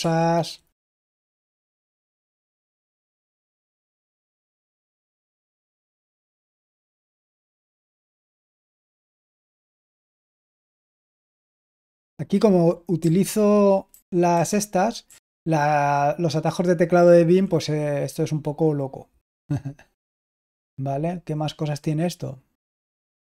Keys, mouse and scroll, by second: 2.1 Home, 2.7 Home, 3.4 End, 3.5 End, 5.0 k, 5.5 j, 6.1 Down, 6.8 Down, 6.8-7.5 Down, 7.9 Down, 9.8 k, 10.8 Escape, 12.9 Left, 13.8 Left, 14.2 Left, 15.0 Right, 15.6 typing, 15.9-17.3 Right, 17.3 typing.